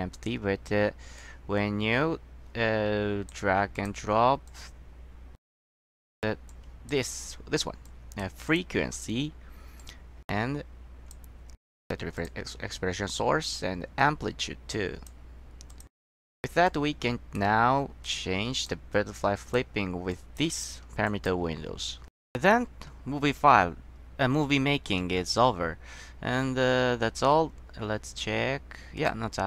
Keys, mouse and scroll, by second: 1.3-3.4 drag, 3.9 click, 4.6-5.5 drag, 6.0 click, 6.6-7.0 drag, 8.0 click, 8.6 click, 9.9-11.3 drag, 12.3 click, 13.7-15.2 drag, 15.8 click, 16.8 click, 18.2 click, 19.3-19.7 drag, 20.2 click, 21.2 click, 27.1 middle click, 29.1 click.